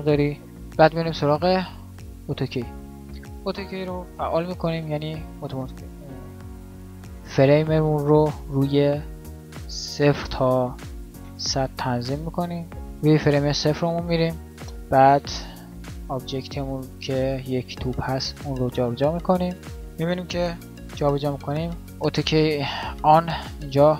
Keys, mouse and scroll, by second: 11.1 KP_0, 15.3 g, 21.0 g.